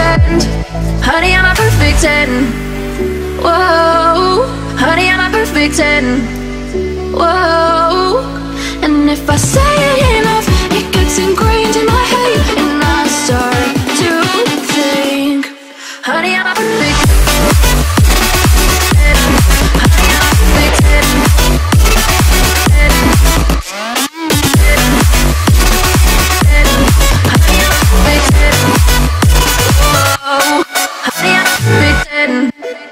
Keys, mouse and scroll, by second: 1.4 click, 1.8-2.3 scroll down 1, 2.3 middle click, 2.6 scroll up 1, 3.9 click, 4.9-6.4 middle drag, 6.4 click, 6.8-7.1 scroll up 1, 7.9 shift+click, 8.6 scroll down 1, 10.2 click, 10.9 middle click, 11.3-12.0 scroll down 1, 12.0-13.3 drag, 13.3 m, 13.4 click, 13.5 click, 15.2 Right, 16.0-17.4 typing, 17.9-20.8 drag, 20.8 m, 21.0 click, 22.3 Right, 22.4-23.8 typing, 24.7 click, 26.1 shift+click, 26.6-28.9 middle drag, 28.9 m, 29.0 click, 30.8 Left, 31.3-32.4 typing.